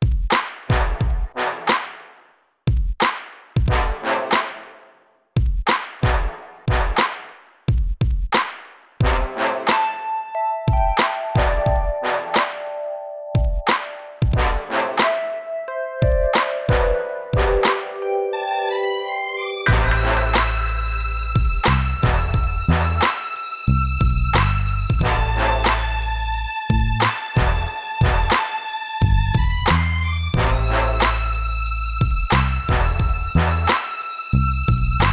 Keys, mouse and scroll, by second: 0.7 click, 1.7 click, 4.0 click, 6.0 click, 6.1 click, 7.9 click, 11.2 click, 13.1 click, 15.5 p, 19.1 scroll up 2, 20.7 click, 23.9 scroll up 2, 25.1 middle click, 27.5 click, 31.5 click, 34.5 click.